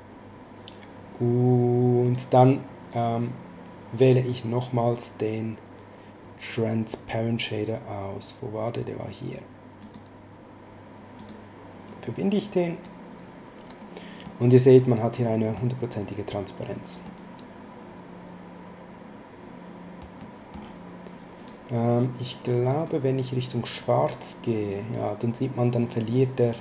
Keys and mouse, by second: 2.0 click, 9.8 click, 11.1 click, 14.2 middle click, 17.1 middle click, 20.1 middle click, 21.4 click.